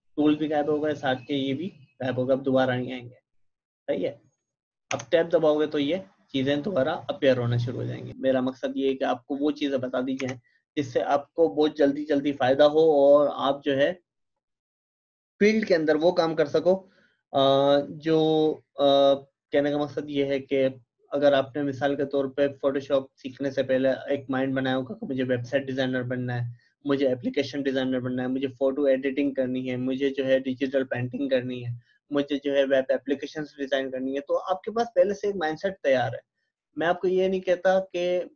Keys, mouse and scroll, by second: 4.7-5.4 typing, 6.8-7.5 typing, 10.2 Tab, 14.2 click.